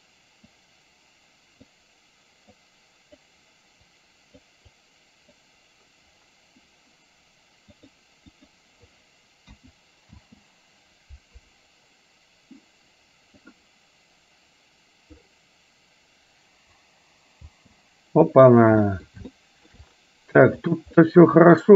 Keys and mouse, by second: 0.5-1.8 drag, 2.6 click, 4.1 click, 4.8 click, 8.0 click, 9.6 KP_1, 10.4 space, 17.5 space, 18.5 middle click, 18.9 middle click, 19.4 shift+middle click, 20.8 click, 21.0 middle click.